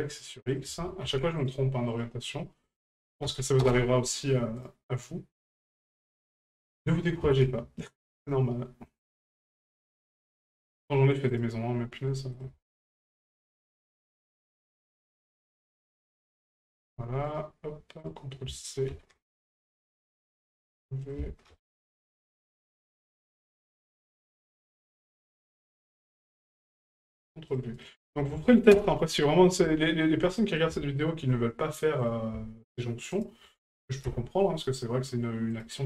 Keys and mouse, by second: 0.6 ctrl+click, 1.9 right click, 2.9 ctrl+click, 4.6 right click, 5.6 ctrl+click, 9.1-10.1 drag, 11.3 right click, 12.4 ctrl+click, 15.7 ctrl+click, 17.3 right click, 18.0-19.4 drag, 21.2 ctrl+click, 22.7 right click, 23.5 click, 27.1 click, 27.7-28.8 drag, 29.8 shift+middle drag, 30.4 middle click, 30.9 shift+middle drag, 32.0 right click, 33.1 shift+right click, 35.5 right click.